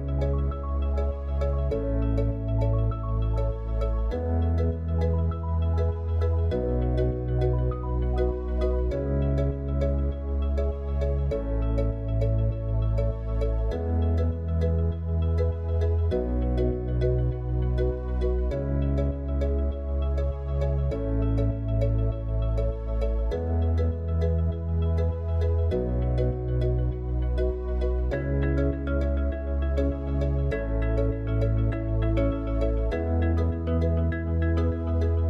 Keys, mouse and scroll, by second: 8.0 Tab, 8.8 click, 10.5-11.8 drag, 13.3 click, 15.8 Tab, 16.4-20.0 middle drag, 20.0 s, 22.5-24.1 middle drag, 28.9 r, 32.0 middle click, 33.8 g.